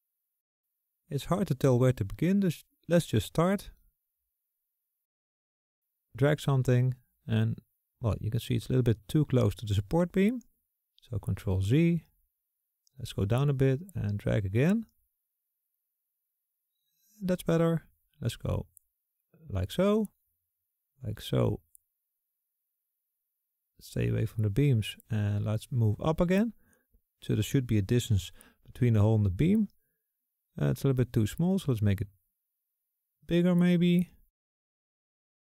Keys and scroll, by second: 2.9 [, 10.3 ctrl+z.